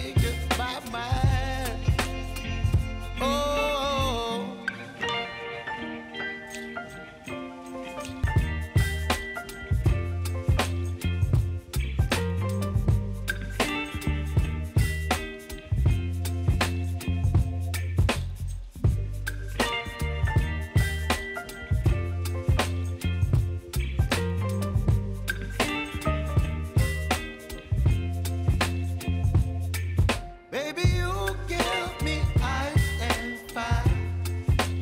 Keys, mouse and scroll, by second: 2.0-5.4 drag, 5.4 space, 7.3-9.6 drag, 11.0-12.5 alt+drag, 12.8 space, 15.4 space, 19.2 space, 20.0-21.4 drag, 23.9-24.4 typing, 24.9 right click, 25.6-32.3 drag, 33.2 p, 34.1-34.8 drag.